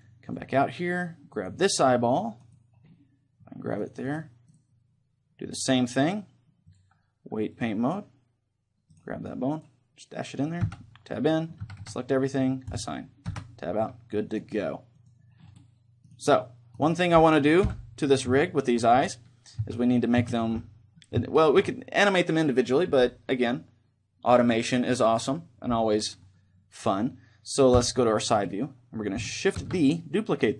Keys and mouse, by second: 0.4-1.9 drag, 1.4-6.5 right drag, 2.9-5.9 drag, 6.7-8.5 drag, 9.0 right click, 9.6-10.7 middle drag, 10.7 Tab, 11.1-12.4 drag, 12.4 a, 12.7-14.3 drag, 13.3 Tab, 15.1 click, 15.6 click, 16.1-18.5 right drag, 17.7 KP_3, 18.6-21.3 middle drag, 19.0 Tab, 19.6 z, 21.3 click, 21.3-27.7 right drag, 22.1-27.7 middle drag, 27.7 KP_3, 29.6 shift+d.